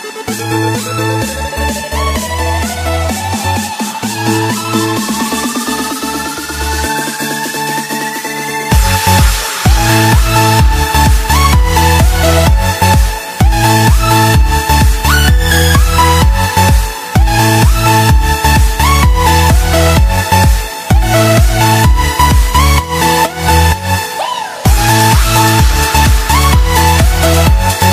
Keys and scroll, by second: 2.9 ctrl+z, 5.7 ctrl+z, 7.3 ctrl+z, 8.9 ctrl+z, 17.5 ctrl+z, 19.7 ctrl+z.